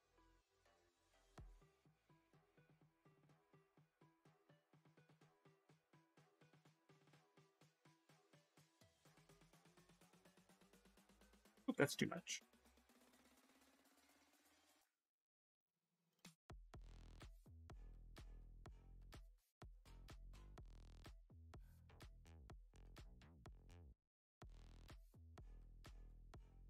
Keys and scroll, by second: 8.3 space, 11.0 ctrl+z, 11.2 ctrl+z, 11.5 space.